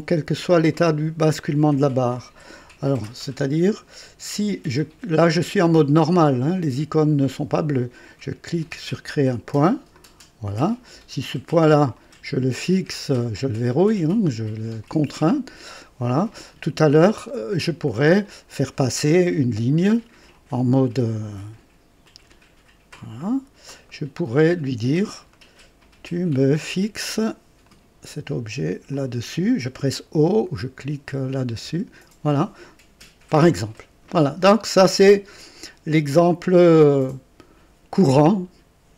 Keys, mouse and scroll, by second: 3.7 click, 8.4 click, 9.9 click, 10.7 right click, 11.9 click, 14.8 click, 17.2 scroll up 1, 17.7 right click, 20.3 click, 22.0 click, 22.9 click, 23.9 right click, 25.3 right click, 26.4 right click, 27.6 click, 28.9 click, 31.6 o, 37.7-38.0 scroll down 2, 38.3 right click.